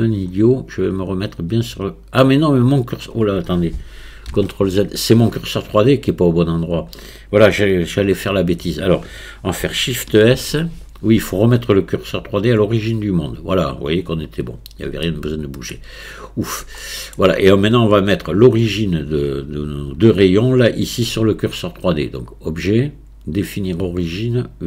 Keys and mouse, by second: 4.3 ctrl+z, 10.4 shift+s, 15.1 shift+click, 16.8-17.2 shift+middle drag, 18.1 click, 22.2-24.6 drag.